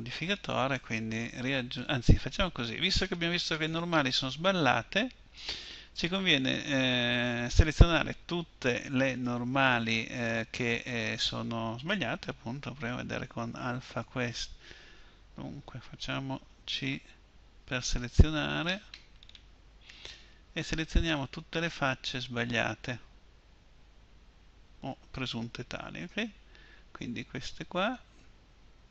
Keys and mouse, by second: 4.2-5.6 middle drag, 13.9-16.8 drag, 16.8 c.